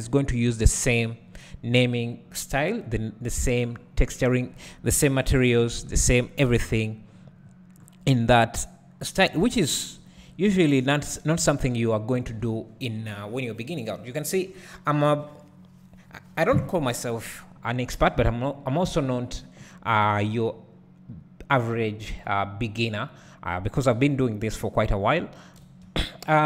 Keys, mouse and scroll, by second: 1.6-3.5 scroll up 1, 3.5 Tab, 3.9-4.3 scroll up 1, 5.0 KP_1, 7.4-8.4 scroll down 1, 8.4 click, 9.3 g, 10.5 `, 11.4-15.0 scroll up 1, 18.0 Tab, 19.0 alt+a, 20.3 k, 25.8 space.